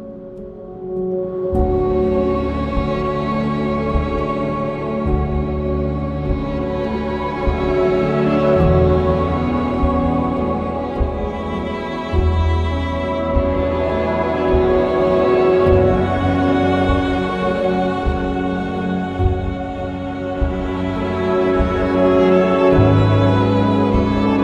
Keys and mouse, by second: 1.0 g, 1.3 x, 2.3 click, 3.9 g, 4.2 x, 6.4 click, 6.9 1, 7.2 click, 7.6 shift+Tab, 8.1 g, 8.6 x, 10.3 ctrl+KP_Add, 10.4 ctrl+KP_Add, 12.7 middle click, 13.4 KP_3, 17.8 g, 18.0 y, 20.4 click, 21.1 r, 22.4 click, 23.4 ctrl+KP_1.